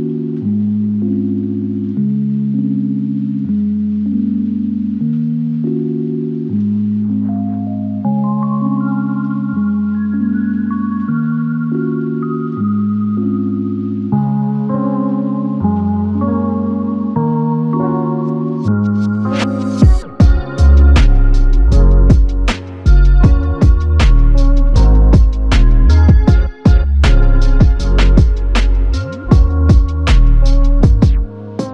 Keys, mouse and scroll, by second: 1.9-2.6 typing, 3.5 ctrl+alt+click, 7.2 ctrl+alt+click, 16.1 double click, 28.4 double click.